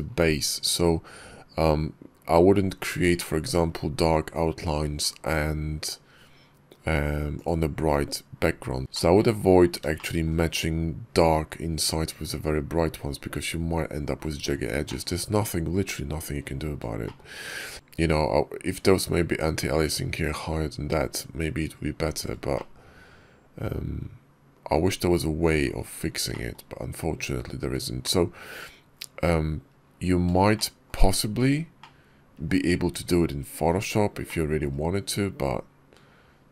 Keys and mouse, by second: 3.0 shift+click, 7.2 click, 8.8 shift+click, 9.8 shift+drag, 14.7 shift+click, 16.9 shift+click, 22.4-24.6 shift+drag, 26.2 shift+click, 30.4 shift+drag, 31.6-32.3 shift+drag, 34.1-34.4 shift+drag.